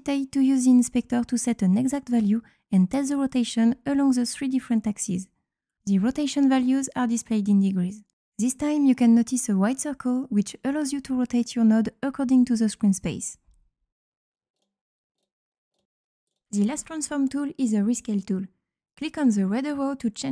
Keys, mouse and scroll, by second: 1.7-2.2 drag, 2.7-3.5 drag, 4.1 click, 5.6 click, 7.1 click, 10.6-13.6 drag, 14.3 click, 14.9 click, 15.5 click, 16.0 click, 18.8 click.